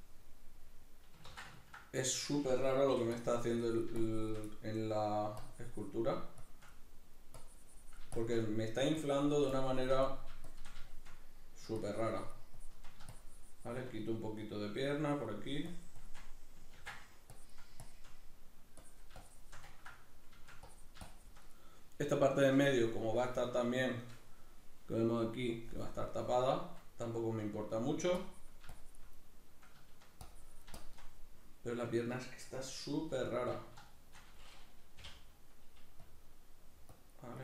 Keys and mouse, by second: 1.3 ctrl+z, 1.6-2.9 ctrl+middle drag, 3.2-4.5 drag, 4.5 middle click, 5.4-6.8 drag, 6.8 middle click, 7.3-8.5 drag, 8.5 middle click, 9.0-10.0 drag, 10.0 middle click, 10.5 shift+click, 10.8-11.8 shift+middle drag, 11.8-14.0 shift+drag, 14.0 middle click, 14.9-18.3 drag, 16.8 ctrl+d, 18.3 middle click, 18.8 click, 19.7-20.7 ctrl+middle drag, 20.7-21.9 drag, 21.9-28.2 middle drag, 28.2-29.2 drag, 29.2-30.2 middle drag, 30.2 click, 31.1-33.2 middle drag, 33.2 alt+q, 33.9-35.0 shift+middle drag, 35.0 k, 36.0-37.4 drag.